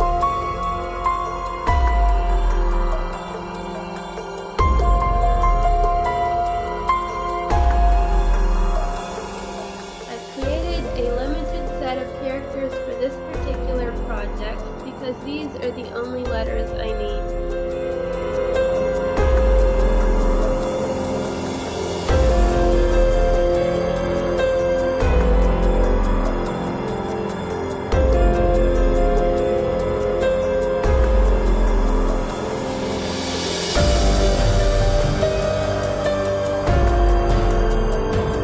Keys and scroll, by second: 1.7 space, 3.2 space, 8.7 space, 14.5 space, 18.1 space, 23.2 space, 32.1 space, 35.5 space, 36.9 space, 38.3 space.